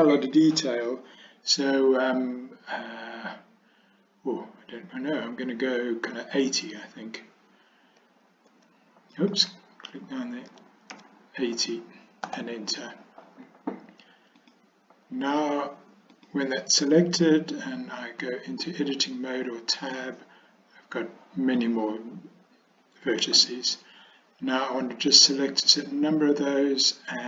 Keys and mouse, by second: 8.5 8, 9.2-12.8 drag, 16.2 click, 18.3 Tab.